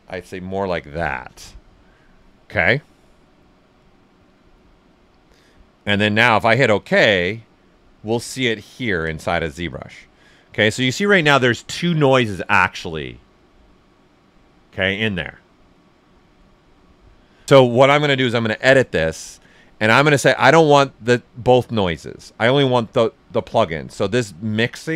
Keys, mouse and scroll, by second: 1.6 click, 3.5 right click, 7.6-13.6 alt+right drag, 19.4 click, 20.8-24.9 drag.